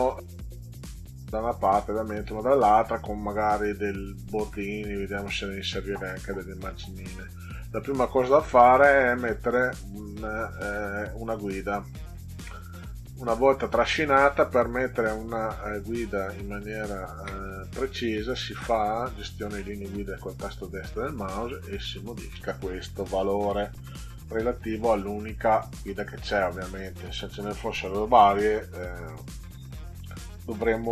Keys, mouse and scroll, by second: 8.5-12.1 drag, 13.6 click, 15.6 right click, 19.4 click, 21.4 click, 23.8 1.